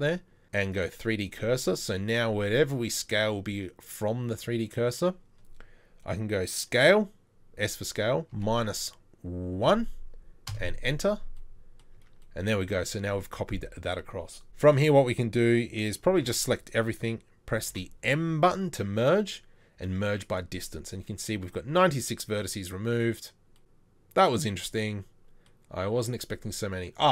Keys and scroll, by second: 2.1 s, 12.0 Tab, 16.2 a, 17.7 m.